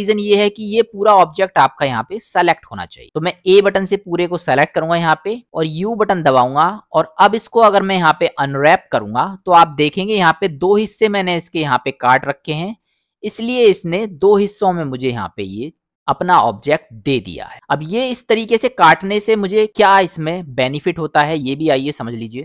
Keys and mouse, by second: 0.6 middle click, 3.4 a, 5.9 u, 10.3 middle click, 13.0 middle click, 17.5 middle click.